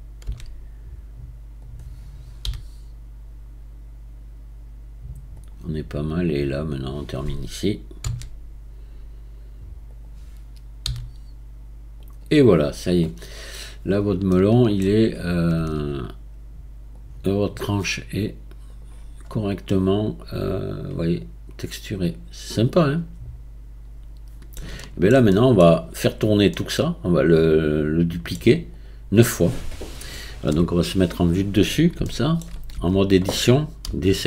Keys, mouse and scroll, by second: 0.2 s, 2.5 g, 6.3 drag, 8.0 s, 10.8 g, 12.6-13.2 scroll down 2, 13.2 scroll down 3, 14.3-15.6 shift+middle drag, 15.6 Tab, 16.9-18.8 drag, 19.7-22.7 middle drag, 24.8-28.7 shift+middle drag, 28.7 click, 30.5 KP_7, 32.1 shift+middle click, 32.8 Tab, 33.9 a.